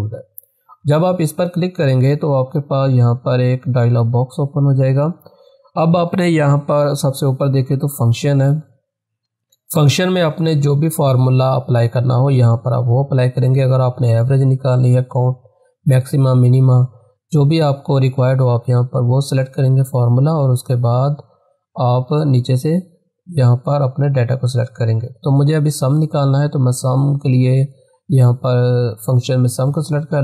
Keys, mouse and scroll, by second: 0.9-5.3 drag, 9.7 click, 26.8 click.